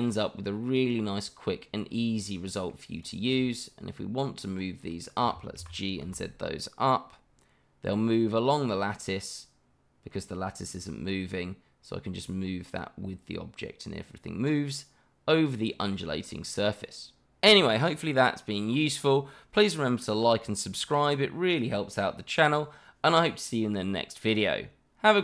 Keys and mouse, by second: 2.9 click, 4.5 shift+click, 5.0 shift+middle click, 5.6 g, 6.1 z, 15.9 click, 16.3-17.3 middle drag.